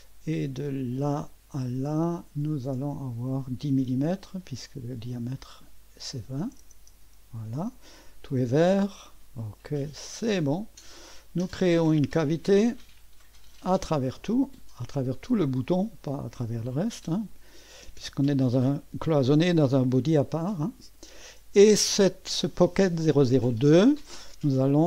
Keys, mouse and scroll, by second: 0.9 click, 2.7 click, 5.1 click, 6.4-7.4 typing, 6.9 Return, 7.9-8.7 scroll up 1, 8.7-9.9 middle drag, 9.9 click, 10.8 click, 11.7 click, 12.2 click, 17.3 click, 21.7 click.